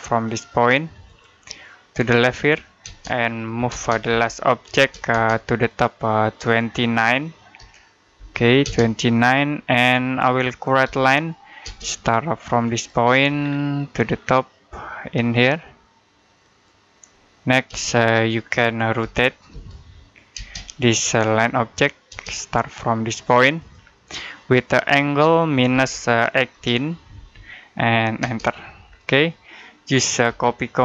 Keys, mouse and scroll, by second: 0.9 click, 2.7-4.6 typing, 5.5 click, 7.4-8.5 typing, 9.7 middle click, 10.7 l, 11.5 space, 12.6 click, 13.2-13.6 scroll down 1, 13.6 middle click, 16.3 click, 17.5 space, 18.2 middle click, 18.8-20.2 typing, 20.7 click, 21.9 space, 22.2-23.4 scroll up 1, 23.4 click, 25.6 typing, 26.8-28.0 typing, 28.7-29.1 scroll down 1, 29.1 middle click, 30.1-30.8 typing.